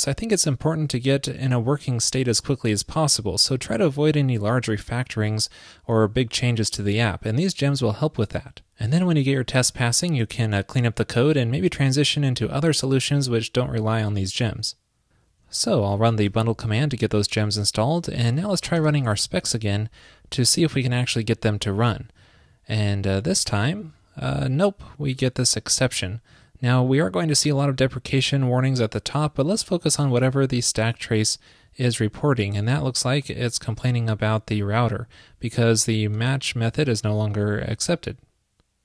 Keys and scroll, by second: 18.2 super+k.